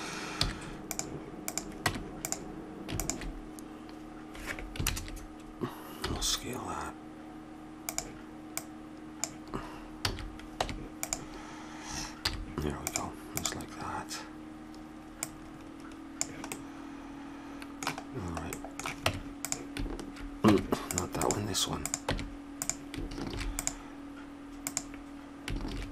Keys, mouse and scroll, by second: 0.4 z, 1.4-4.7 drag, 1.8 Tab, 4.8 ctrl+KP_Add, 6.0 s, 8.6-10.3 drag, 10.0 a, 10.6 Tab, 12.2 z, 13.3-16.5 drag, 16.5-18.3 middle drag, 18.4 middle click, 19.0 Tab, 20.5 Tab, 21.2 click, 22.0 Tab, 23.3 ctrl+r, 25.7 ctrl+r.